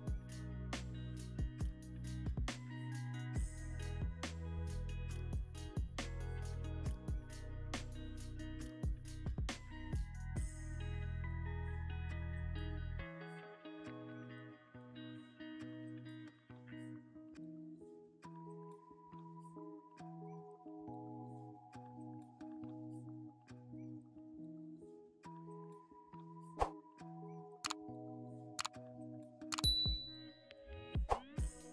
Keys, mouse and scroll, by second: 0.0-1.3 typing, 8.5 scroll down 1, 13.3 double click, 15.4 double click, 17.6 typing.